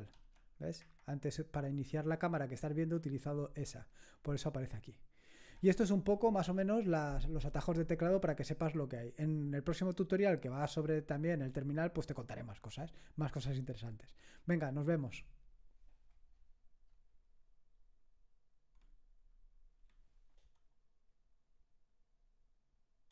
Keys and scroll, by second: 0.1 Down, 0.8 Up, 5.4 Down.